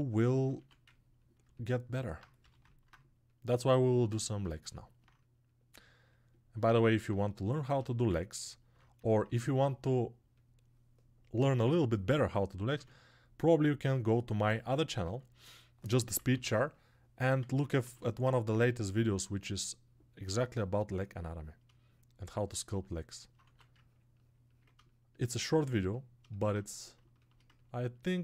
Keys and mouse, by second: 0.0 click, 6.4-28.2 ctrl+alt+drag, 14.4 ctrl+r.